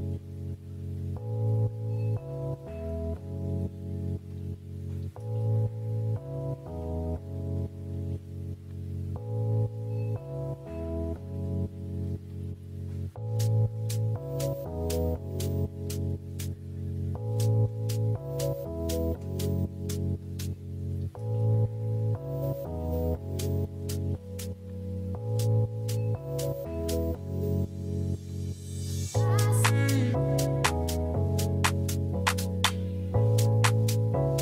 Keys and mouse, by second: 0.6 click, 1.1 Tab, 2.4 click, 3.7 ctrl+s, 4.7 shift+middle drag, 5.2 ctrl+s, 5.5 click, 5.7 middle click, 6.7 click, 8.9 shift+middle click, 9.7 ctrl+s, 10.5 click, 11.3 click, 14.2-14.5 shift+middle drag, 15.6 shift+middle drag, 16.1 click, 17.1 click, 19.4 middle click, 20.6 KP_Decimal, 21.4 shift+middle drag, 21.8 middle drag, 23.3 click, 24.9 click, 28.0 click, 29.6 click, 31.9 middle drag, 33.2 shift+middle drag, 34.1 ctrl+s.